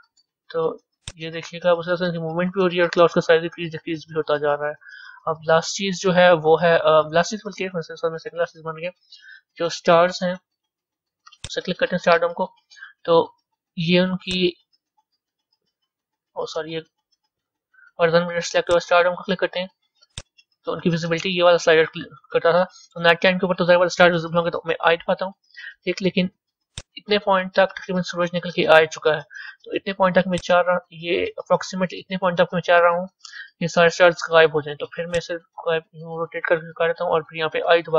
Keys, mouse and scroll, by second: 1.0-4.0 drag, 11.5 click, 14.3-17.3 drag, 18.5 click, 20.1-23.2 drag, 26.7-33.3 drag, 35.1-37.9 drag.